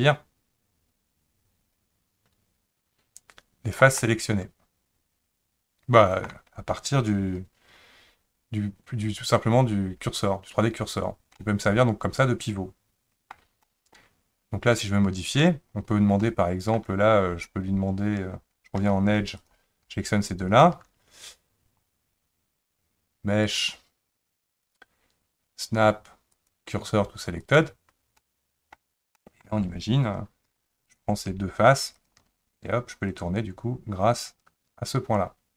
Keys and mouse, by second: 4.0-6.2 middle drag, 11.3-13.3 middle drag, 13.6 middle click, 16.2 middle click, 18.8 2, 19.4 click, 23.5-27.6 drag, 28.2 middle click, 29.1 middle click, 30.4 3, 30.9 click, 31.9 shift+click, 33.1-35.5 drag.